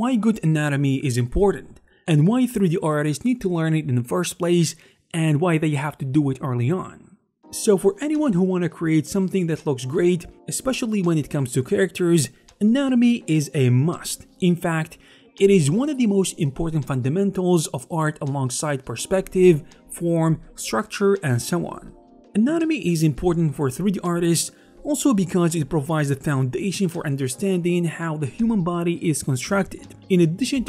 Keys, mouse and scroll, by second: 9.0 click, 9.2 right click, 9.9 g, 11.3 click, 11.8 middle click, 12.6 a, 12.9 alt+g.